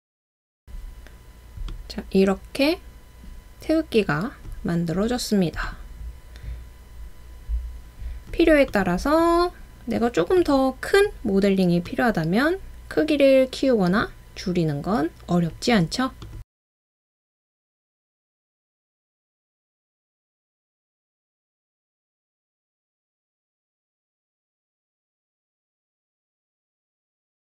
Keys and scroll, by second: 0.9 typing, 4.4 typing, 6.6 typing, 12.8 typing.